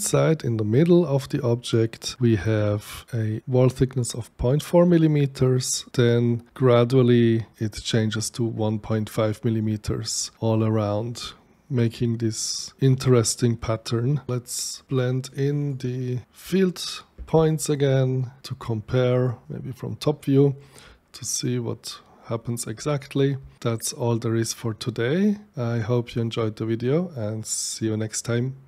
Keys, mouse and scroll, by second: 9.5-12.8 right drag, 15.3 click, 21.2-22.8 shift+right drag.